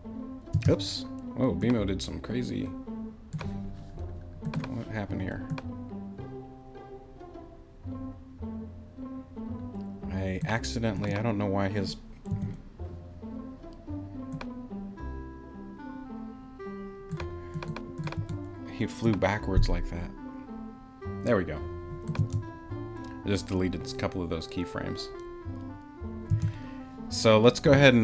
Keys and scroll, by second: 0.5 space, 12.3 BackSpace, 18.2 BackSpace, 22.2 space, 26.3 space.